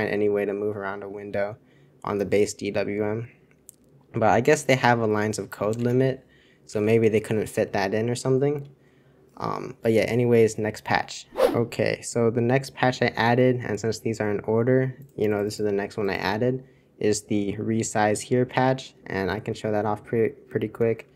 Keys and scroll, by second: 5.9 super+1, 6.7 super+2, 18.6 super+1, 19.2 super+c.